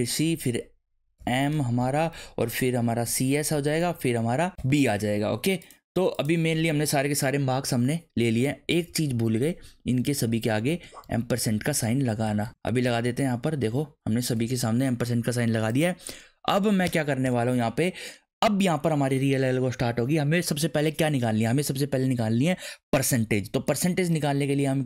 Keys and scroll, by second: 0.0-4.6 typing, 8.7 Left, 10.1 shift+7, 10.3 Left, 11.3 shift+7, 11.5 Left, 12.1 shift+7, 12.2 shift+Left, 12.7 shift+7, 12.8 Left, 13.6 shift+7, 14.3 ctrl+s, 16.8 Return, 17.2 Return.